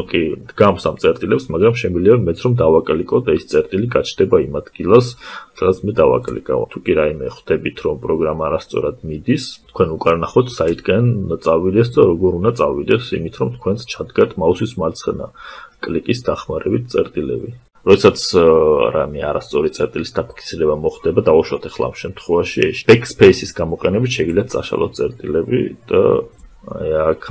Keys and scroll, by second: 21.4 BackSpace, 27.2 space.